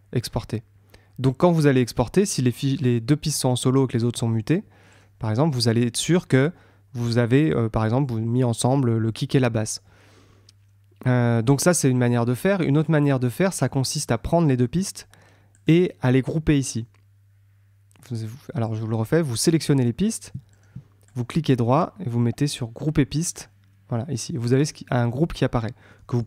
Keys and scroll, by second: 25.1 super+r.